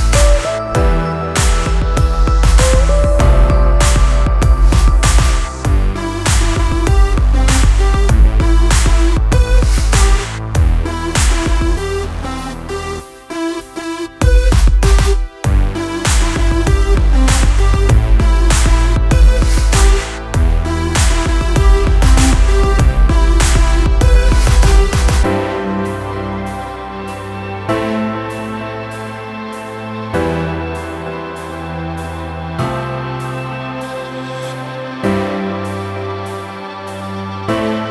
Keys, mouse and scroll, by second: 0.3 scroll down 1, 0.9 scroll up 1, 1.6 click, 2.2 click, 2.7-3.1 scroll up 1, 3.7 click, 4.4 click, 4.9 scroll up 1, 5.2 right click, 5.6 click, 7.7 click, 8.2 click, 8.9 click, 10.3 click, 11.1 click, 12.8 click, 13.8 click, 17.3 click, 18.0-18.4 scroll up 1, 18.4 scroll down 1, 18.7-19.1 scroll up 1, 19.3-19.6 scroll down 1, 19.6 click, 21.6 click, 22.6 click, 23.6 ctrl+click, 25.0 right click, 25.4 click, 25.7 ctrl+click, 26.9 click, 27.7 click, 27.8 double click, 29.2 click, 30.8 click, 31.0 double click, 33.6 click, 35.7 scroll up 1, 37.1 click.